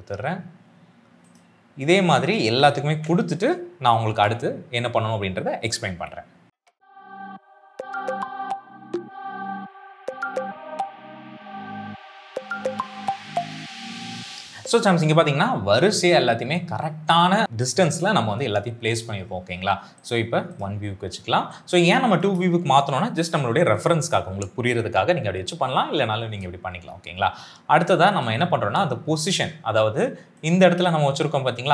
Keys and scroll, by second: 2.8 ctrl+v, 4.0 Return, 7.8 ctrl+v, 8.4 ctrl+v, 9.3 ctrl+v, 10.0 ctrl+v, 10.5 ctrl+v, 11.4 ctrl+v, 11.9 ctrl+v, 12.3 ctrl+v, 13.1 space, 13.6 ctrl+v, 13.7 Return, 14.0 s, 21.3 space.